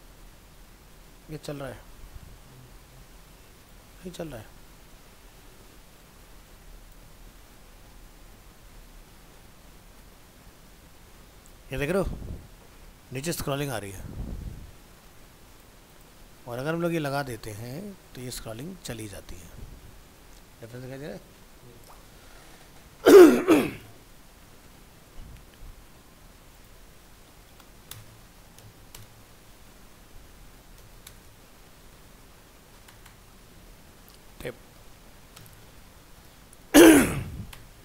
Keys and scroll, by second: 2.0 alt+Tab, 7.3 ctrl+x, 8.4 alt+Tab, 16.6 alt+Tab, 17.3 ctrl+v, 17.7 ctrl+s, 18.4 alt+Tab, 25.0 alt+Tab, 37.2 ctrl+Left.